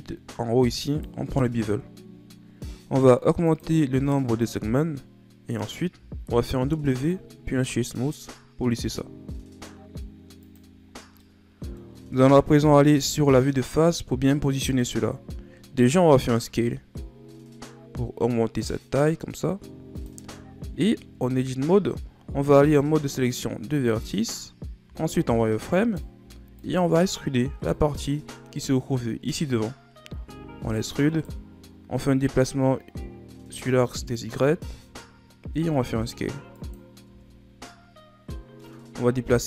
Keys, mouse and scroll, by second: 3.4-5.9 drag, 5.9 w, 10.4 click, 10.8-11.1 scroll down 2, 11.1-12.8 middle drag, 12.8 KP_7, 14.3-16.1 scroll down 3, 16.1 s, 20.3-20.7 scroll down 4, 20.7-21.1 scroll up 2, 21.1 Tab, 22.7 ctrl+Tab, 24.8 z, 25.7 right click, 26.1 b, 30.0 e, 32.0-34.3 drag, 34.3 z, 35.5 s, 37.0 Tab, 37.4 scroll down 1, 37.6-38.9 middle drag, 38.9 a, 39.3 a.